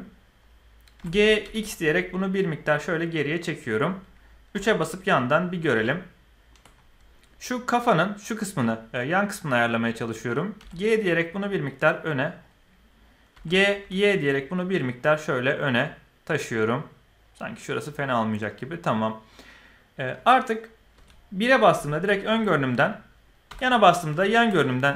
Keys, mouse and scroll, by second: 0.9 g, 4.5 KP_3, 5.8 shift+drag, 5.9 shift+middle drag, 6.0-6.5 shift+drag, 10.5 g, 13.3 g, 18.4-20.2 middle drag, 20.9 KP_1, 21.7 shift+middle drag, 23.4 KP_3, 24.1 shift+middle click, 24.3 shift+click.